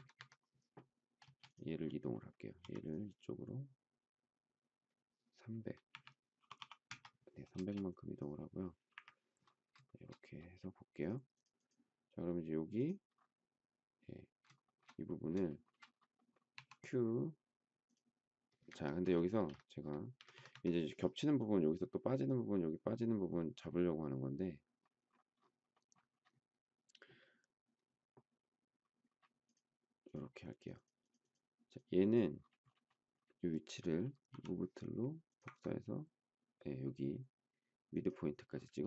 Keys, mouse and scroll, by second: 0.1 Escape, 1.2 space, 2.6 m, 5.5-7.5 typing, 8.9 Delete, 9.8 shift+middle click, 14.6 shift+middle click, 15.4 shift+middle click, 15.6 shift+double middle click, 16.5 q, 18.7 Escape, 19.2 space, 19.3 Escape, 20.2 Escape, 34.3 m.